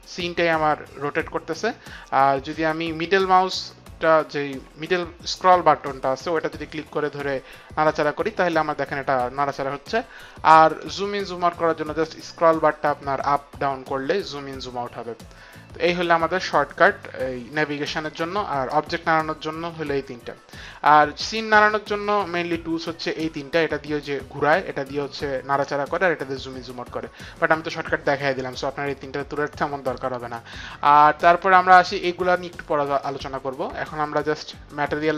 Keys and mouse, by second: 6.4 middle click.